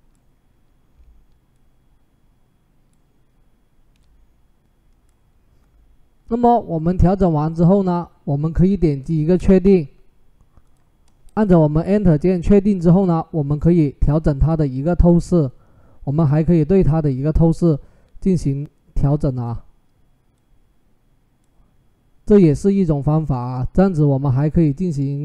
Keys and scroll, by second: 9.1 Return, 11.1 Return.